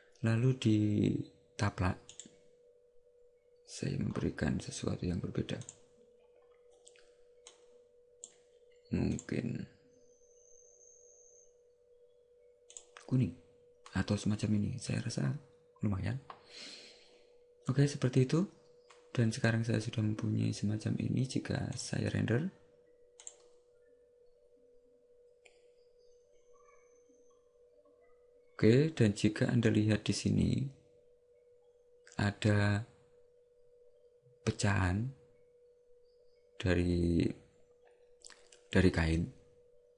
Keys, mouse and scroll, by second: 2.2 right click, 4.1 scroll up 1, 5.5 scroll up 3, 5.7 click, 7.7 click, 21.9 click.